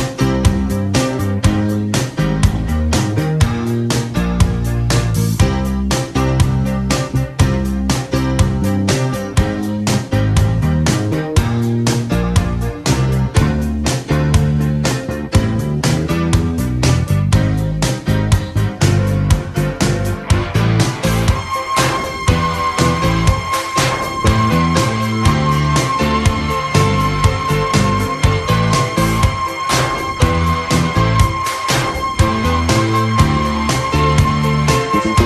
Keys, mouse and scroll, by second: 2.4 Tab, 3.5 n, 17.8 n, 20.8 KP_3, 21.8 KP_1, 27.7-29.1 middle drag, 29.1-30.4 drag, 29.1 r, 31.4-34.0 drag, 34.4 Tab, 35.0 s.